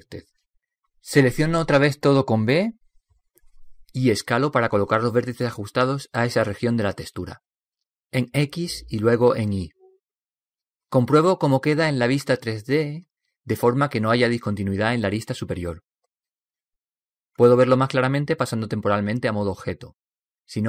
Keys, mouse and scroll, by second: 2.1 b, 4.9 s, 10.9 s, 14.2-16.1 middle drag, 18.0 Tab, 18.6-20.6 middle drag.